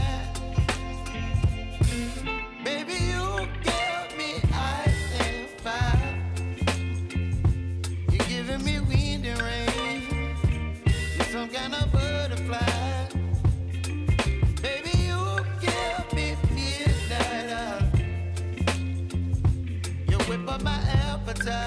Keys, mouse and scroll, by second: 0.5 scroll down 1, 3.2 click, 4.5 Return, 5.7 click, 6.2-7.0 typing, 9.2-10.6 typing, 12.6 click, 15.9 click, 18.7 p, 19.6-20.9 drag, 20.9 ctrl+z.